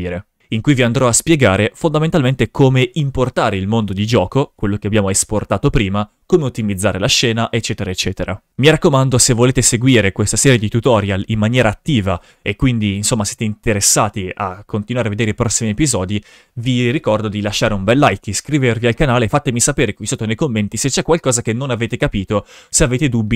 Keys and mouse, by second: 8.5 shift+f.